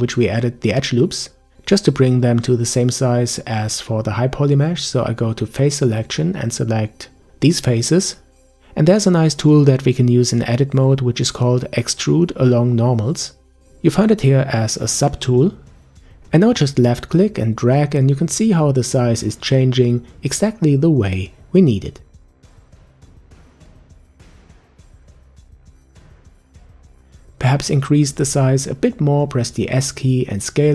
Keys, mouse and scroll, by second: 0.7 Tab, 4.8 click, 5.5 b, 7.5-8.2 scroll down 1, 8.2-9.4 middle drag, 9.4-10.0 scroll up 3, 12.3-15.3 drag, 17.2 click, 23.4 click, 24.3-25.3 middle drag, 25.3-28.3 scroll up 1, 28.5 s.